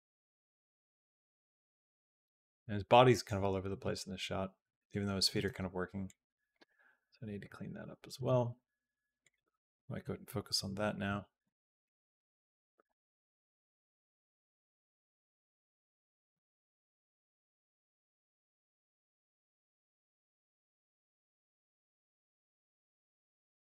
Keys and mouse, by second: 2.1 space, 2.7 click, 3.6 space, 5.3 space, 5.9 click, 6.5 space, 8.0 space, 9.0 click, 10.5 Down, 10.9 Down, 11.3 Down, 11.7 Down, 12.0 Down, 12.2 Down, 12.7 Up, 13.2 Up, 13.8 Up, 14.2 Up, 14.4 Up, 16.9 middle click, 17.6 r, 20.3 Down, 20.7 Up, 21.3 Down, 21.9 Up, 23.0 Down, 23.3 Up.